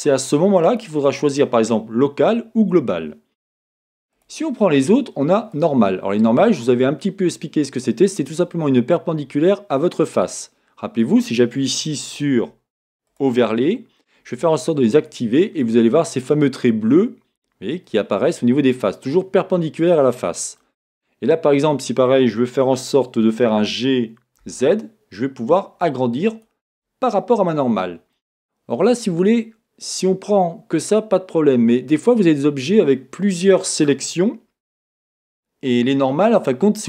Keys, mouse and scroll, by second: 4.1-6.7 drag, 6.7-13.1 middle drag, 13.1-15.6 drag, 15.6-36.8 middle drag, 23.6 g, 26.4 click.